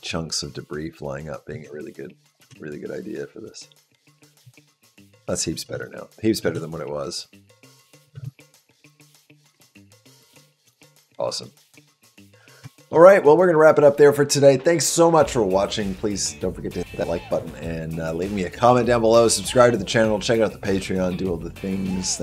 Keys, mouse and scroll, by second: 1.3 space, 2.0 click, 2.3 space, 5.5 space, 6.1 click, 6.3 space, 8.0 space, 8.3 click, 8.9 click, 9.2 space, 10.8 space, 11.7 shift+middle click, 12.2 middle click, 12.5 shift+middle click.